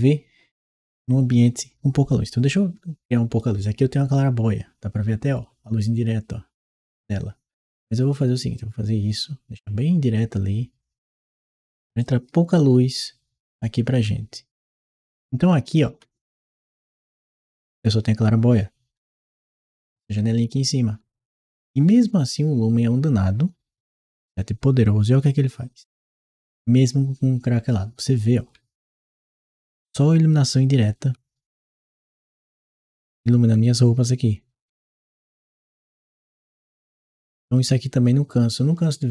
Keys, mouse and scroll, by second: 6.8 right click, 11.8-38.2 ctrl+right drag, 12.7 w, 13.8 a, 15.7 a, 17.7 w, 19.8 s, 24.2 w, 25.9 a, 27.0 w, 27.4 a, 28.4 a, 31.9 d.